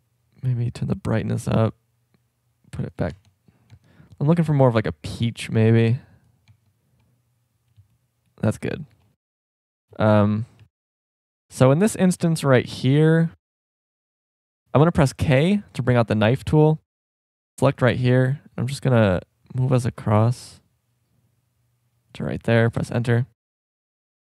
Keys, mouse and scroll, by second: 3.1 Tab, 3.7 Tab, 7.1 Tab, 9.0 shift+scroll up 1, 9.1 middle click, 10.6 a, 10.7 c, 15.2 k, 23.2 middle click.